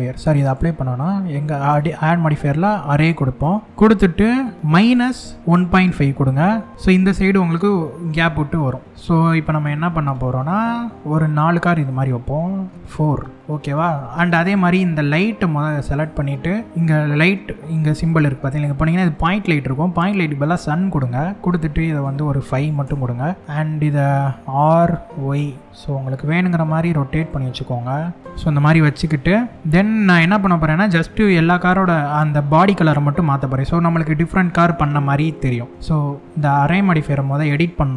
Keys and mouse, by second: 1.2-2.8 drag, 3.6 middle click, 4.5-6.7 drag, 7.4 middle click, 8.9-10.1 middle drag, 11.4-13.2 drag, 20.1 click, 21.6-23.1 drag, 23.9 r, 24.8 y, 26.8 right click, 27.5 r, 28.2-29.0 drag, 29.6 middle click, 34.5 shift+click.